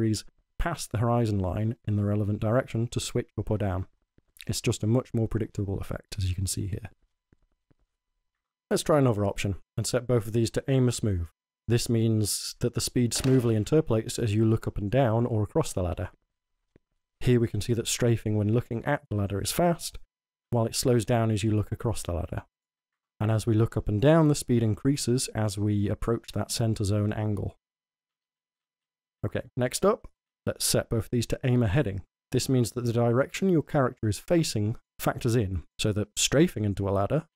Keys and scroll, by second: 0.0 w, 14.0 w, 23.4 w, 27.1-31.7 typing, 37.2-37.3 typing.